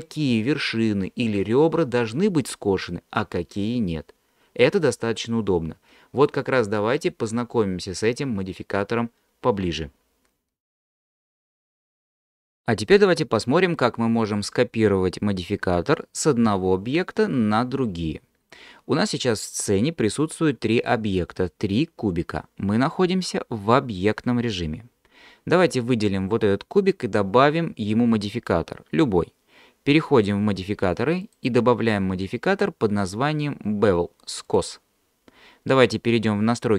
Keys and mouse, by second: 31.3-34.6 drag.